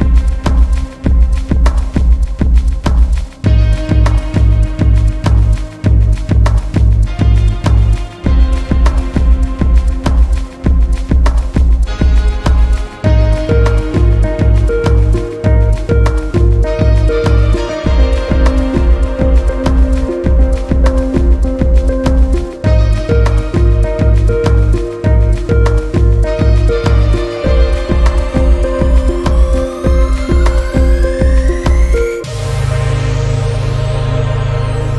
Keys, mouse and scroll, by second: 0.1 shift+middle click, 0.6-1.5 scroll up 1, 1.5 scroll up 1, 1.6 alt+click, 2.2-2.6 scroll down 1, 2.6 s, 6.4 alt+click, 6.8 scroll down 2, 7.2 scroll up 1, 7.4 scroll down 1, 7.7 Tab, 7.9-9.2 middle drag, 9.2 KP_7, 9.6-10.3 scroll up 3, 10.3-11.0 shift+middle drag, 11.0 Tab, 13.2 alt+z, 14.2 alt+click, 14.8 click, 15.7 click, 16.7 alt+z, 17.5 g, 20.9 Tab, 21.0-21.4 scroll down 3, 21.4-23.0 middle drag, 23.0 KP_7, 23.4-24.0 scroll up 2, 24.0 Tab, 24.8 g, 26.2-27.5 shift+middle drag, 27.5 click, 28.1 g, 30.3 click, 30.6 g, 31.5 click, 31.8 g, 32.8 click, 33.0 g, 34.2 click, 34.4 g.